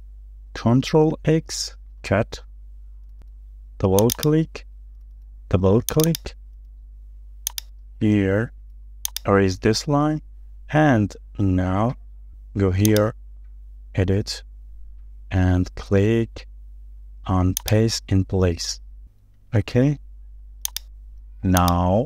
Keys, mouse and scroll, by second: 1.9 ctrl+x, 2.7-3.0 scroll down 1, 4.2 double click, 6.1 double click, 6.6 scroll down 1, 7.0 shift+middle click, 8.8 e, 18.7-19.1 scroll down 1, 19.7 shift+middle click, 19.9-20.4 shift+scroll down 2, 20.4 space.